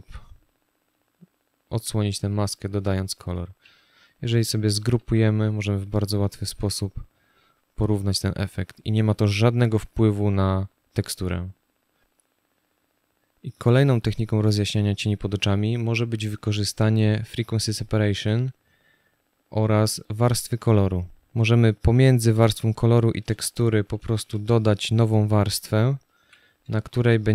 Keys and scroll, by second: 1.4 z, 2.1 space, 4.6 ctrl+g, 23.6 ctrl+shift+n, 25.9 z, 27.0 space.